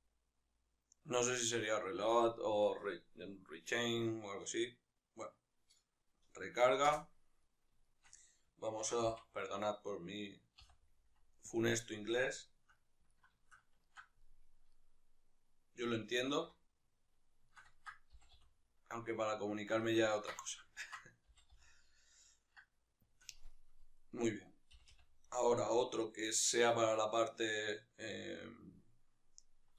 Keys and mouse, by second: 6.6 Return, 6.6-11.3 middle drag, 8.5 shift+d, 11.3 click, 12.2-14.1 shift+middle drag, 16.1 alt+q, 17.2 shift+middle click, 17.8 g, 19.5-22.8 ctrl+shift+middle drag, 21.0 g, 22.8 shift+click, 23.2 right click, 24.5 g, 29.2-29.6 right drag, 29.6-29.7 ctrl+shift+middle drag.